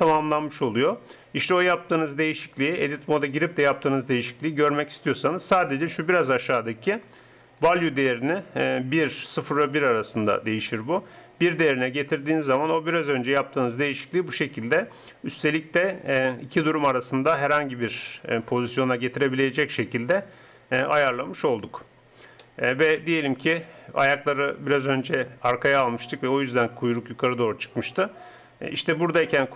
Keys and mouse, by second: 7.6-9.4 drag, 22.5 middle click, 26.1-29.5 middle drag.